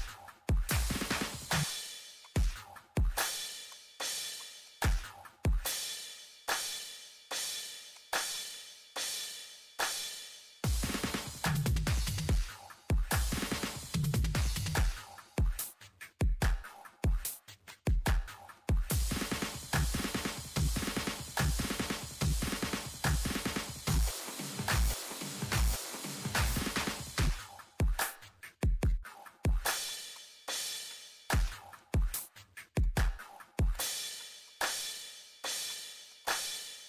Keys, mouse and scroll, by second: 1.1 ctrl+middle click, 1.5 click, 7.9 click, 9.6 middle click, 10.9 click, 11.5 middle click, 11.5-11.9 scroll up 2, 14.0 click, 15.8 Escape, 16.1 scroll up 1, 16.6 scroll down 1, 17.1 ctrl+middle click, 17.7 click, 18.7 Escape, 18.9 ctrl+middle click, 19.3 ctrl+scroll up 2, 19.8 click, 20.0 Delete, 20.2 click, 20.4 ctrl+middle click, 20.8 click, 22.3 8, 22.6 shift+middle click, 23.3-23.7 ctrl+scroll up 2, 24.3 scroll down 1, 27.9 click, 28.4 Escape, 29.8 click, 31.0 Escape, 31.3 click, 31.5 click, 33.9 Escape, 34.2 click, 35.8 Escape, 36.1 click, 36.5 scroll up 1.